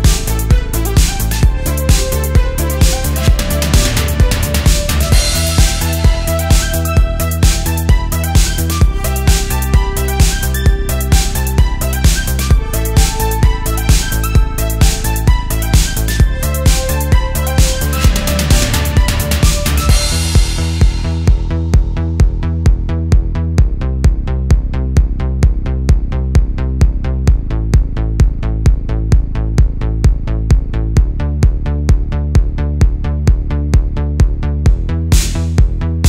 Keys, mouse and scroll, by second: 1.5 ctrl+r, 3.4-4.4 right drag, 4.4-4.8 scroll down 2, 5.3 middle click, 5.3-5.9 scroll down 3, 6.1 click, 6.6 middle click, 7.6-8.2 scroll up 1, 8.2 scroll up 1, 8.3 middle click, 9.0 shift+middle click, 10.4 3, 11.2 click, 11.9 shift+click, 12.4 shift+middle click, 13.4 middle click, 16.1 shift+d, 16.9 right click, 17.7 p, 19.2 Tab, 20.2 click, 20.7 click, 21.4 Tab, 22.2 shift+middle click, 23.0-23.5 scroll up 2, 23.5 a, 30.2 right click, 31.0 ctrl+z, 32.4-35.7 drag, 35.9 click.